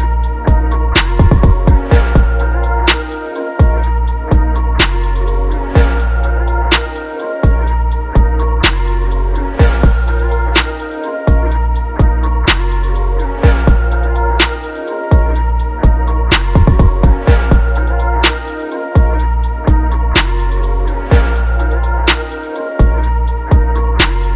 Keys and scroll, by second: 0.2 ctrl+t, 1.0 Down, 1.2 Right, 1.5 Left, 1.6 Down, 1.9 Up, 2.2 Return, 5.4-6.0 typing, 6.6 ctrl+z, 9.3 ctrl+z, 10.9 typing.